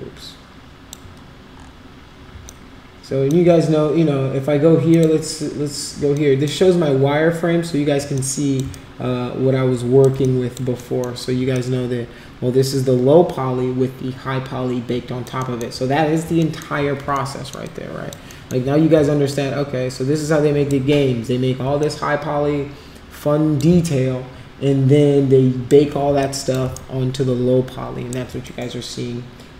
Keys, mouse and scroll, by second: 2.4 alt+click, 4.9 click, 6.1 alt+click, 8.1 alt+click, 8.7-10.0 shift+right drag, 10.2 alt+click, 10.8 alt+middle click, 11.5-15.2 alt+drag, 15.4 alt+middle click, 16.4 alt+middle click, 17.1 alt+middle click, 17.6 alt+click, 18.3 alt+middle click, 19.4-20.8 shift+right drag, 21.8-23.6 alt+drag, 23.8-25.7 shift+right drag, 26.1 alt+click, 26.8-28.2 shift+right drag, 28.4-29.5 alt+drag.